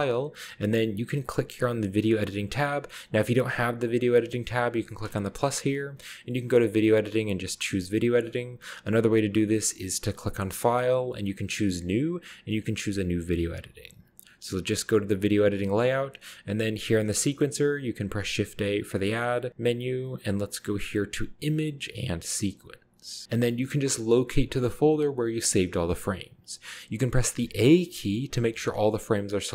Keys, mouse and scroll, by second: 2.6-3.8 scroll down 2, 5.1 click, 9.5-10.4 scroll up 1, 10.3 click, 14.8 click, 17.4-18.0 middle drag, 18.2 shift+a, 27.4 a, 27.8 a.